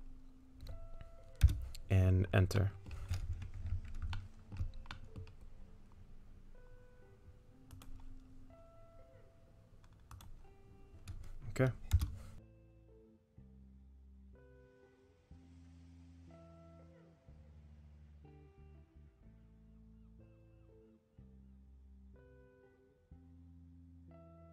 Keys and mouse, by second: 2.6 middle click, 4.2 shift+middle click, 4.9 middle click, 7.7-12.2 drag, 12.6 middle click, 13.2 middle click, 14.4 middle click, 15.0 middle click, 15.3 shift+middle click, 15.9 middle click, 16.4 shift+middle click, 17.5-19.6 drag, 19.9 middle click, 20.3 shift+click, 20.6 middle click, 22.5-24.5 drag.